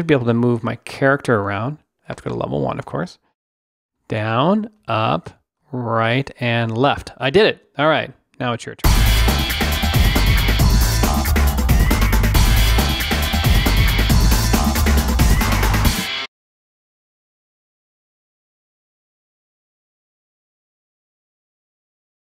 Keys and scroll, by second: 0.0 Down, 4.0 Down, 4.8 Up, 5.6 Right, 6.4 Left.